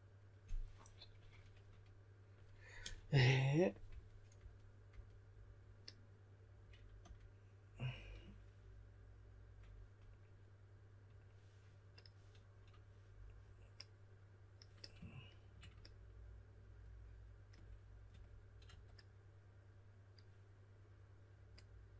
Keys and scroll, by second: 3.8-4.8 typing, 6.9 typing, 18.0-19.1 typing.